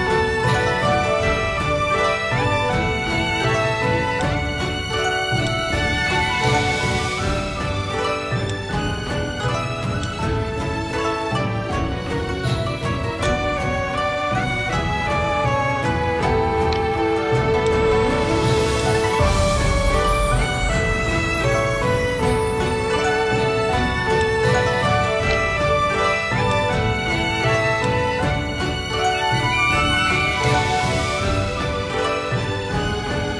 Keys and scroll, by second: 2.4-4.1 typing, 3.4 Tab, 10.1 v, 13.9 shift+x, 14.9 v, 23.4 d, 24.8 /, 25.7 v.